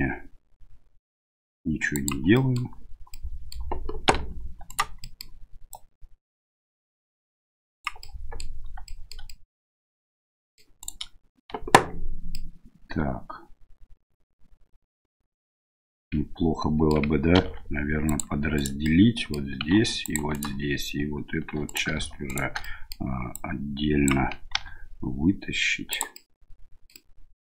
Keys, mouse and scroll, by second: 2.3 middle click, 3.2 middle click, 4.1 1, 4.7 right click, 5.0 middle click, 5.7-7.8 drag, 8.0 middle click, 8.9 shift+middle click, 9.3-10.6 middle drag, 10.8 right click, 12.3-16.9 middle drag, 17.3 ctrl+r, 18.9 middle click, 19.7 ctrl+r, 21.5 3, 21.7 right click, 22.3 shift+right click, 22.6 middle click, 23.3 click, 24.6 e, 26.2-27.4 middle drag.